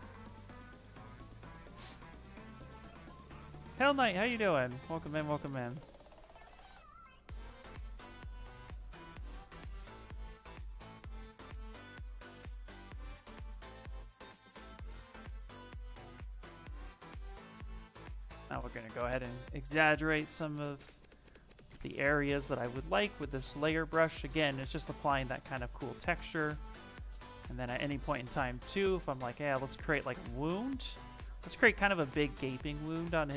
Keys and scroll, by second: 5.3 s, 9.1 s, 26.6 s, 28.3 s, 30.5 s, 31.6 space, 33.1 s.